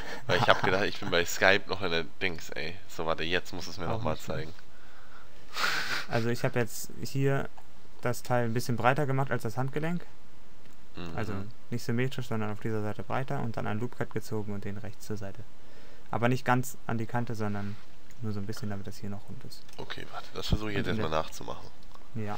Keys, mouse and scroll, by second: 1.9-5.7 middle drag, 5.8 middle click, 18.1 Tab, 20.6 z.